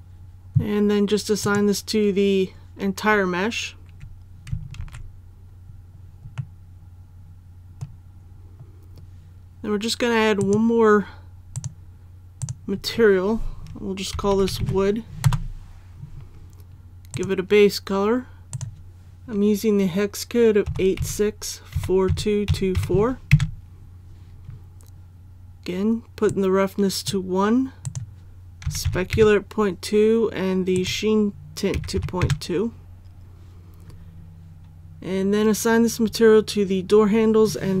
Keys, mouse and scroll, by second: 4.8 alt+a, 5.6-6.4 scroll up 1, 6.4-8.2 middle drag, 8.2-10.4 scroll up 1, 10.4 click, 14.1-14.6 typing, 15.2 Return, 17.1-19.6 drag, 20.7-22.7 typing, 26.2 click, 28.6 KP_Decimal, 28.8 KP_2, 30.7 click, 31.7 KP_Decimal, 31.9 KP_2, 35.6-37.8 scroll up 1.